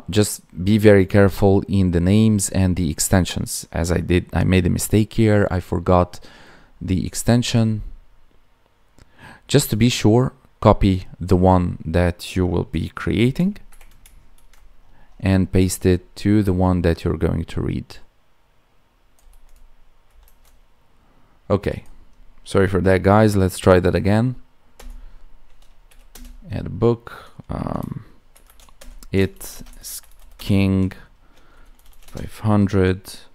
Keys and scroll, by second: 14.3 ctrl+c, 19.2 ctrl+v, 29.4 space.